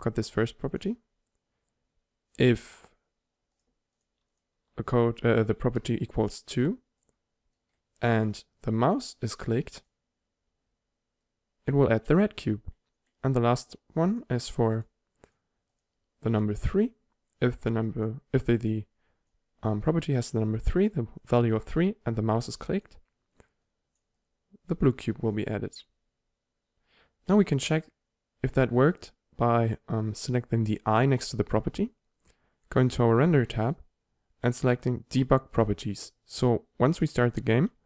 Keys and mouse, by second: 2.7-3.6 drag, 6.3-7.1 drag, 14.2-20.1 drag, 23.9 click.